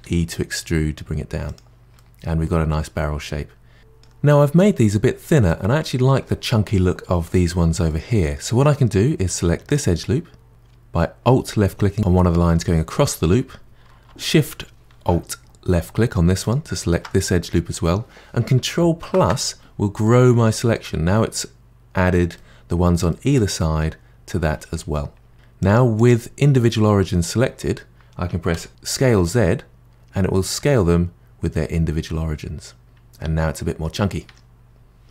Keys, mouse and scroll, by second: 2.0-3.3 middle drag, 3.3-3.8 scroll up 2, 3.8-5.0 middle drag, 7.9-9.7 middle drag, 9.7 alt+click, 16.4 alt+click, 19.0 KP_Add, 20.0-25.3 middle drag, 25.3 click, 26.0-28.5 drag, 28.5 s, 32.8-34.2 middle drag, 34.2 Tab, 34.6-35.1 scroll down 1.